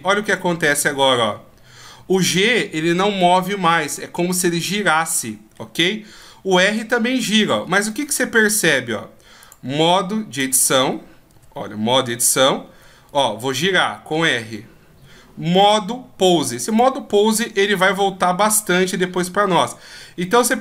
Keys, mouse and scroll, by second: 4.9 middle click, 6.0 r, 7.8 middle click, 9.3 click, 11.2 g, 13.0 r, 15.5 click, 17.8 g, 20.3 right click.